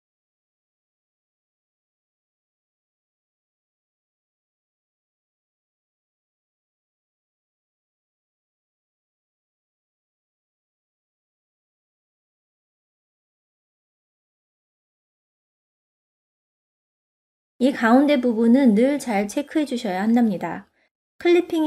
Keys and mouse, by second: 1.2-2.6 shift+drag, 2.9-4.6 middle drag, 6.2 Tab, 6.8 middle click, 8.6 click, 9.7-10.9 middle drag, 11.8-13.1 drag, 13.4 middle click, 14.3 shift+middle click, 15.0 middle click, 16.0 click, 17.4 click, 19.2 click, 20.0 click, 20.4 click, 21.3 click.